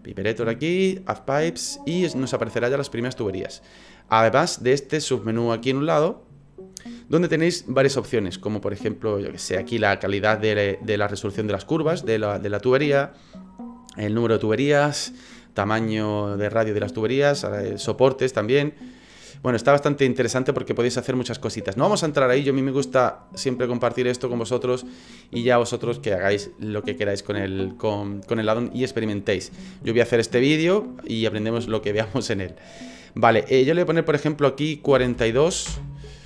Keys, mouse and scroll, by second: 0.1 click, 1.2 click, 2.1 middle click, 5.8 click, 11.8 scroll up 4, 19.1 middle click, 33.9 click.